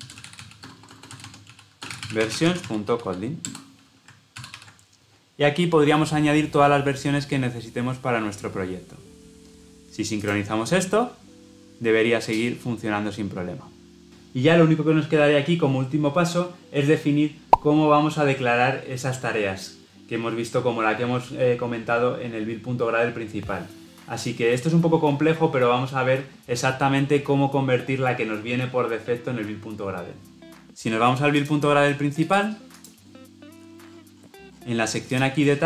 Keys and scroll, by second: 3.3 Return, 4.2 ctrl+alt+l, 6.6 ctrl+alt+o.